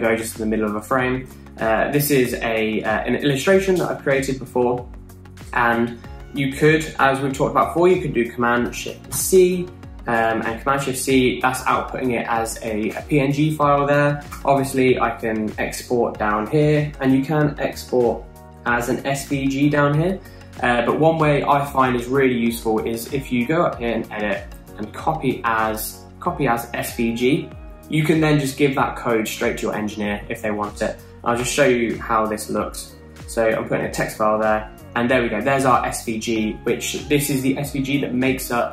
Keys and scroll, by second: 9.6 shift+super+c, 10.6 super+v, 14.8 BackSpace, 31.9 t, 34.4 super+v.